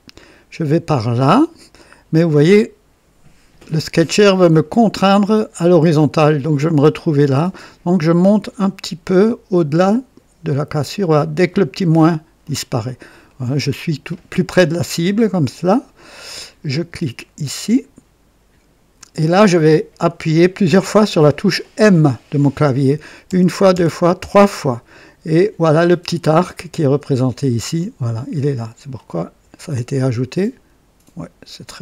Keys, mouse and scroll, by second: 12.4 click, 13.3-14.3 right drag, 14.6-15.0 scroll up 2, 15.4-16.0 right drag, 18.9 click, 23.2-24.1 typing.